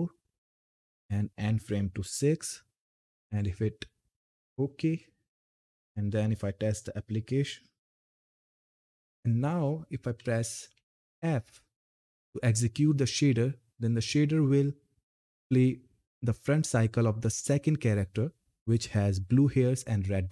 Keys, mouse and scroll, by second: 0.1 click, 3.0 click, 4.5 Down, 6.9 ctrl+F10, 9.1-9.9 typing, 12.8 typing.